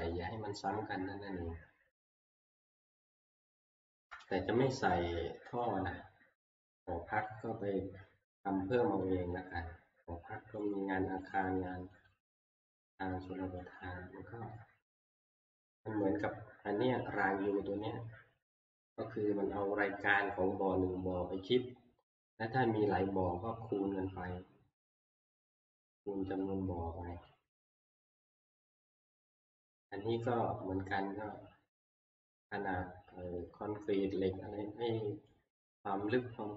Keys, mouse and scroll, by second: 3.1 click, 3.4-4.8 scroll, 5.4 middle click, 5.6 shift+middle click, 7.3 click, 9.0 middle click, 10.7 click, 11.3 click, 12.1 click, 13.8 click, 15.2 shift+middle click, 16.0 middle click, 27.3 middle click, 29.5 shift+middle click, 30.3 click, 36.1 click.